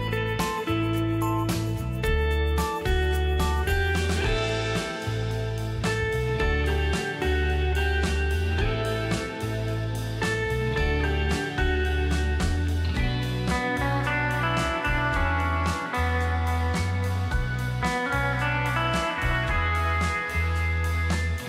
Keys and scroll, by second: 0.0 Delete.